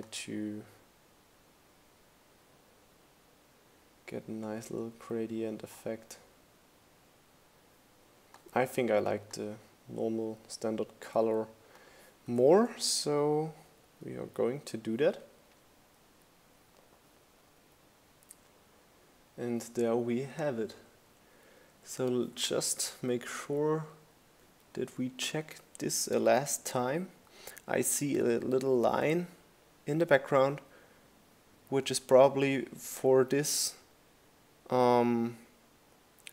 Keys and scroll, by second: 8.3 Down.